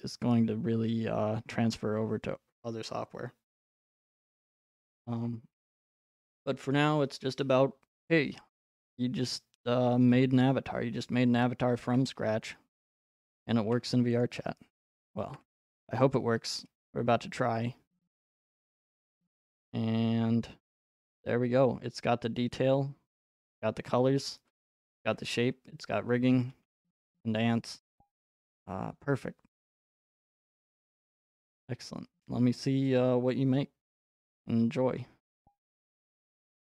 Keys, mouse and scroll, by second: 6.3 click, 12.3 e.